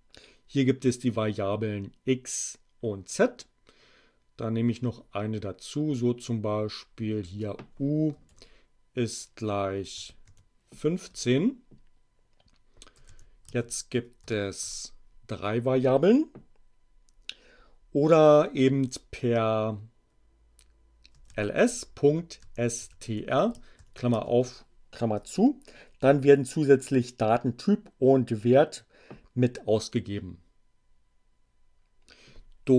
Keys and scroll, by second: 7.2 u, 8.3 shift+0, 9.9 1, 10.2 5, 11.1 Return, 12.7-14.4 typing, 14.6 shift+Return, 20.8-24.2 typing, 25.1 Return, 32.6 r.